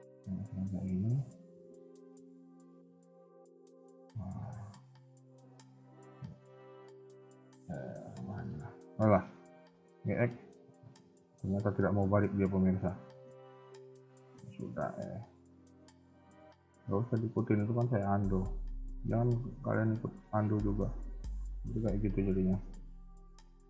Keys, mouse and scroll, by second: 0.2 Tab, 2.1 ctrl+z, 2.6 ctrl+z, 3.1 ctrl+z, 3.4 ctrl+z, 5.3 ctrl+z, 5.5 shift+middle click, 7.0 ctrl+z, 7.5 ctrl+z, 8.6 ctrl+z, 9.4 g, 12.7 middle click, 13.4 KP_3, 14.5 r, 19.6 KP_1, 19.9-20.4 scroll down 2, 20.5 shift+middle click, 20.8-21.6 scroll up 1, 21.6 r, 22.5 g.